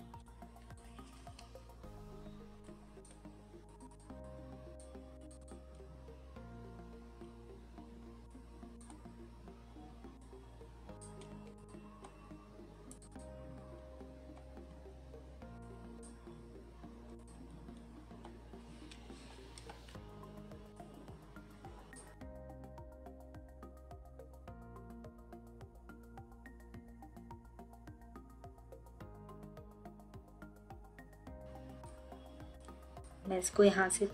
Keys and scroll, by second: 1.0 j, 19.3 3.